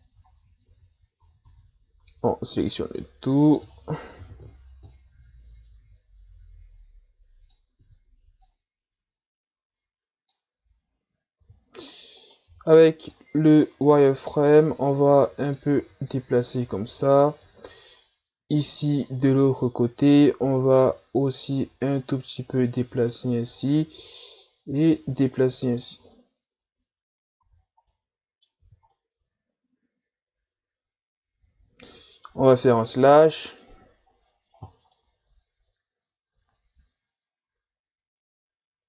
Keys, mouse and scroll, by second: 0.2-0.7 ctrl+scroll up 2, 0.7 Tab, 1.2 a, 1.4 a, 2.0 a, 2.6-4.2 drag, 4.2 o, 4.8-7.8 drag, 7.8 z, 8.4-11.4 drag, 11.4 z, 12.2 right click, 12.5 b, 13.8-15.7 drag, 15.7 Tab, 16.8-17.4 ctrl+scroll up 2, 17.4 Tab, 18.0-18.7 ctrl+scroll up 2, 18.7-19.4 ctrl+scroll up 2, 20.2 right click, 20.4 b, 22.0-23.1 drag, 23.1-24.4 scroll up 3, 24.4-26.0 drag, 26.0 Tab, 26.8 a, 27.1-27.9 scroll down 4, 27.4 a, 27.9-28.6 middle drag, 28.6 z, 28.9-33.0 middle drag, 33.0 KP_Divide, 34.1-34.9 scroll down 3, 34.9-38.8 middle drag.